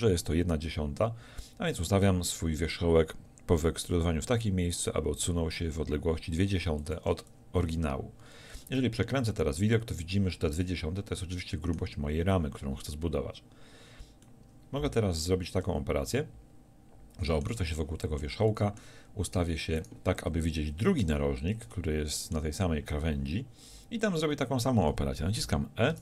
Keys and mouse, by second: 8.8 middle click, 10.0 middle click, 10.6 middle click, 19.8-21.7 drag, 25.9 e.